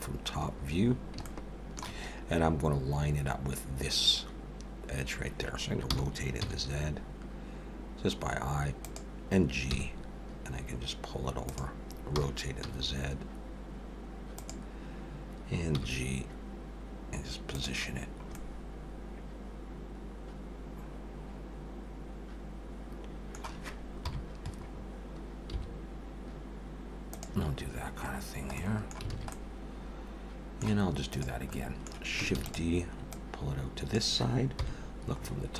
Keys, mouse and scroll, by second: 0.9 scroll up 4, 1.2 shift+middle click, 5.9 r, 9.7 g, 12.2 r, 15.7 g, 18.0-18.3 scroll down 5, 18.3 middle click, 24.0 KP_7, 24.7-25.0 scroll up 4, 25.5 g, 27.5-27.9 scroll down 4, 28.5 scroll down 2, 28.6 middle click, 29.1 alt+a, 29.3 middle click, 31.1 click, 31.5 middle click, 32.4 shift+d, 33.1 click, 34.6 KP_7, 35.2 scroll up 4.